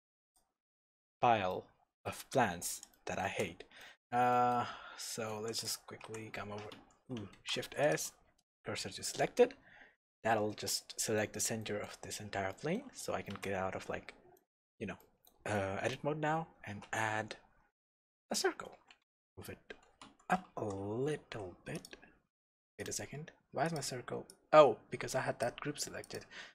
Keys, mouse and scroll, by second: 0.2 click, 0.7 scroll up 1, 1.0 Tab, 1.5-5.6 middle drag, 2.2-2.9 scroll down 1, 4.7-5.3 scroll up 1, 5.3 3, 5.6 click, 6.0 s, 6.9 Escape, 7.3 shift+s, 10.7-12.2 middle drag, 12.2-12.5 scroll down 2, 12.5 middle click, 13.3 Tab, 13.9-14.4 scroll up 2, 14.4-15.5 middle drag, 16.0 scroll down 1, 16.3-16.7 scroll up 1, 16.7 shift+a, 19.0 g, 19.1 z, 20.2 Escape, 20.6 g, 20.7 z, 22.9-23.6 middle drag, 23.6 click, 24.3 click, 26.0 click.